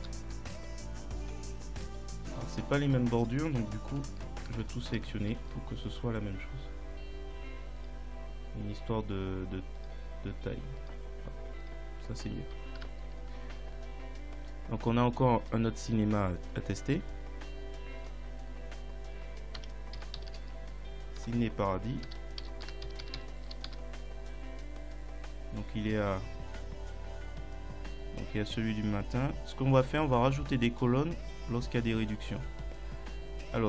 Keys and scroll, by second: 0.0 ctrl+Up, 4.5 shift+Right, 5.3 ctrl+shift+Down, 12.8 ctrl+Up, 19.6 c, 20.0 i, 20.2 n, 20.3 2, 23.1 i, 23.2 s, 23.7 Return.